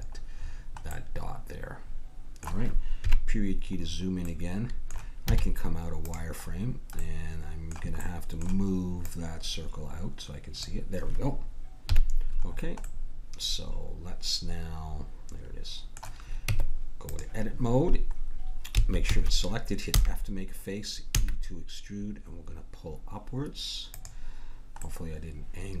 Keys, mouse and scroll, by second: 3.0 KP_Decimal, 5.3 z, 9.1-11.9 drag, 11.9 KP_Decimal, 12.4-14.3 middle drag, 16.5 Tab, 18.7 a, 19.1 a, 19.9 f, 21.1 e, 24.8-25.8 middle drag.